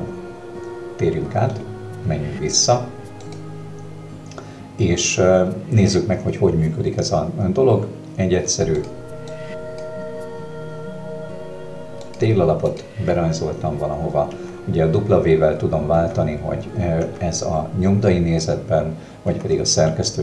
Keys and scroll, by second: 3.3 Escape, 14.4 w, 17.0 w, 19.4 w.